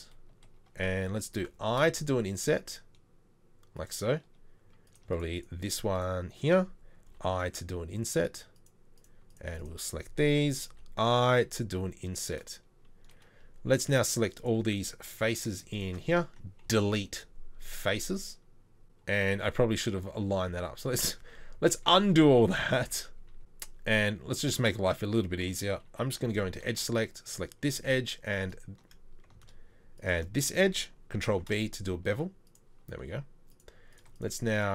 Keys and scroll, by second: 1.9 shift+i, 16.6 Delete, 20.7 ctrl+z, 20.9 ctrl+z, 21.4 ctrl+z, 21.6 ctrl+z, 21.8 ctrl+z, 21.9 ctrl+z, 22.1 ctrl+z, 22.3 ctrl+z, 22.5 ctrl+z, 22.7-23.4 ctrl+z, 24.3 3, 26.2 3, 26.8 2, 31.3 ctrl+b.